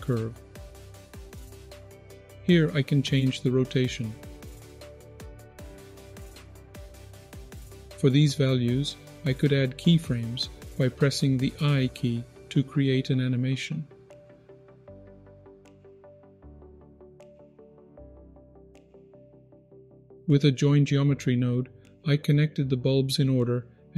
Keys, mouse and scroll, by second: 1.3 ctrl+z, 2.7-5.3 drag, 5.5 ctrl+z, 6.1 click, 7.1 ctrl+z, 7.6-14.5 drag, 14.6 ctrl+z, 14.7 click, 15.5 ctrl+z, 15.6-17.1 drag, 17.2 ctrl+z, 17.5 click, 18.6 ctrl+z, 19.3 scroll down 1, 19.4 middle click, 19.9-20.4 scroll down 2, 20.2 middle click, 20.7-23.3 scroll up 6.